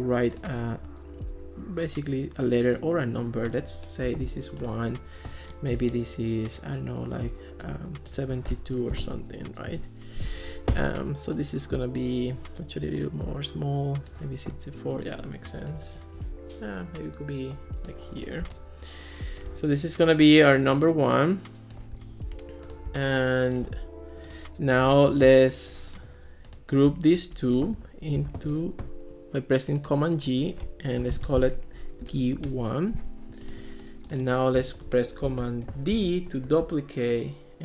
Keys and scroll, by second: 4.1 1, 8.7-9.7 typing, 9.7 Return, 28.2 super+c, 30.9-32.2 typing, 32.4 Return, 35.3 super+d.